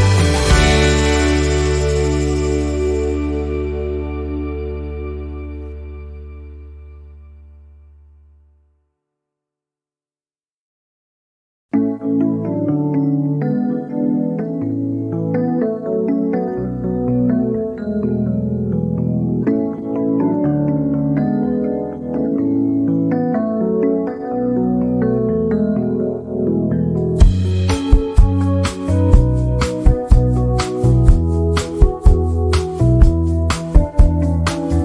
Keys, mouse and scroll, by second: 0.7-1.1 shift+scroll down 1, 2.9 z, 3.0 click, 5.5 F10, 6.6 click, 6.7 click, 8.0 Delete, 8.9 click, 10.6 shift+scroll down 1, 12.8 click, 19.7 z, 20.0-23.7 drag, 23.7 ctrl+z, 25.1-30.7 drag, 32.6-34.8 drag.